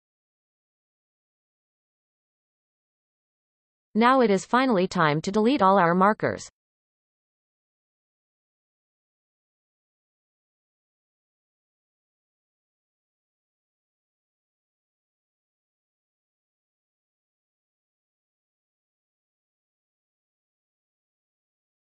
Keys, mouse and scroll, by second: 2.5 Tab, 2.9 a, 3.5-5.5 middle drag, 5.5 click, 6.5-6.9 shift+drag, 6.9-8.0 shift+middle drag, 8.0 KP_7, 8.6-8.9 scroll up 1, 9.4 shift+click, 11.2 shift+click, 12.5 shift+click, 13.6 shift+click, 14.5 shift+click, 15.4 shift+click, 16.3 shift+click, 17.0 shift+click, 17.7 shift+click, 18.1-19.4 shift+middle drag, 19.4 shift+click, 20.3 shift+click, 21.2 ctrl+z, 21.8 shift+click.